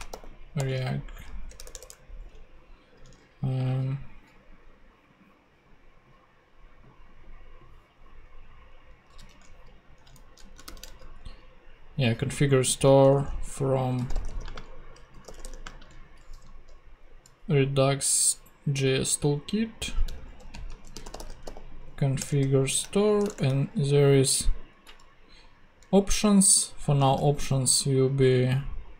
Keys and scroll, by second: 1.5 BackSpace, 3.1 super+Tab, 9.3 super+c, 9.3 super+Tab, 10.4 super+Right, 10.8 shift+super+Left, 10.8 shift+super+v, 11.9 super+v, 13.0 Return, 13.7-16.1 typing, 20.4-21.9 typing, 22.2 Return, 22.8 shift+Return, 23.0 shift+[, 23.3 shift+Return, 24.3 Return, 27.1-28.7 typing.